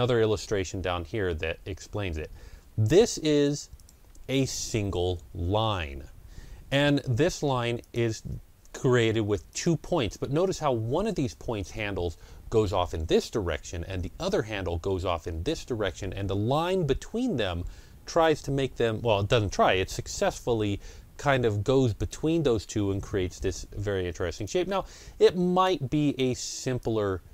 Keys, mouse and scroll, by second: 0.3-0.7 ctrl+scroll down 2, 1.2 ctrl+scroll down 1, 2.8 ctrl+scroll down 1, 3.6 click, 7.7 click, 7.7-9.4 scroll down 1, 9.4 click, 24.3-27.3 drag.